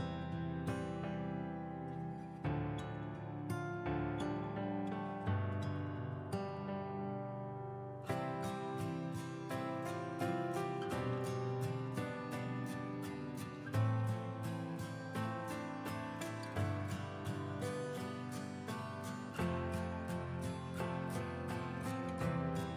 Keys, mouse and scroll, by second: 10.2 click.